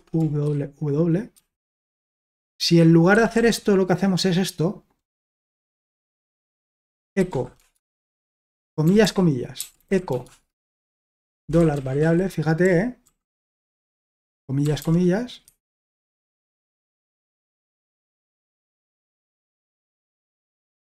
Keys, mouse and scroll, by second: 0.5 ctrl+w, 1.3 ctrl+w, 3.1 typing, 5.5 typing, 6.7-8.0 typing, 9.3-14.0 typing, 15.4 Escape, 15.9-16.6 typing, 16.8 Return, 17.8 ctrl+w, 18.0 ctrl+w.